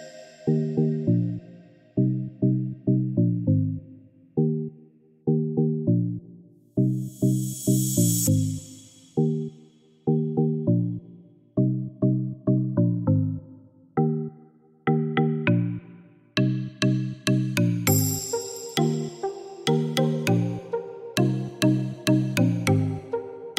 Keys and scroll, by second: 3.5 5, 3.7 0, 4.0 Return, 10.0 2, 10.1 0, 11.2 Return, 20.1-21.8 typing, 22.1 Return.